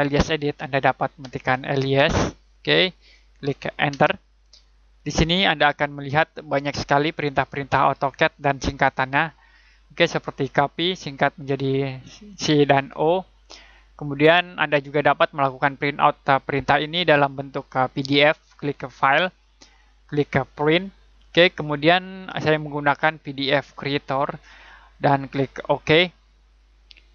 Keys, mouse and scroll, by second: 1.0-2.6 typing, 3.9 space, 6.1 click, 19.0 click.